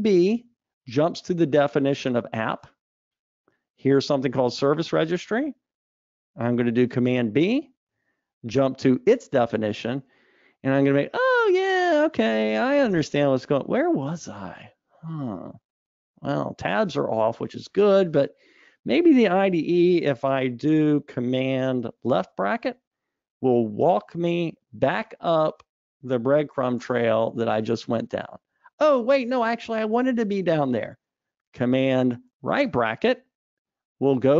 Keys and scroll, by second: 1.0 super+b, 8.4 super+b, 22.9 alt+super+[, 33.2 alt+super+].